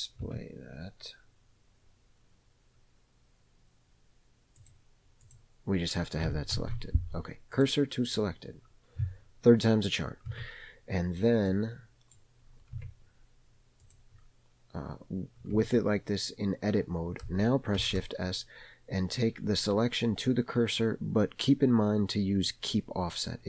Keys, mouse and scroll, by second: 0.3 Tab, 4.6 click, 5.2 click, 6.5 shift+s, 10.3 Tab, 11.4 middle click, 12.4 scroll up 1, 12.8 Tab, 13.8 click, 15.6 Tab, 17.7 shift+s.